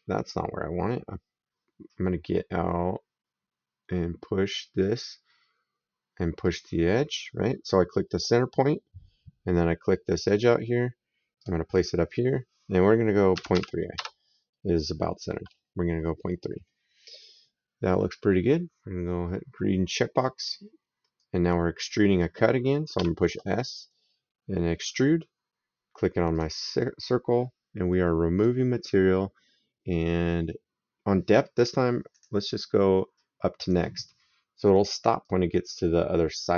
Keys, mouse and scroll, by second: 4.3 click, 6.3 click, 11.2 click, 13.2 KP_Decimal, 13.4 KP_3, 13.8 KP_Enter, 20.2 click, 21.0 right click, 22.8 s, 24.6 click, 26.1 click, 28.2 click, 32.0 click, 33.4 click, 35.0 right click.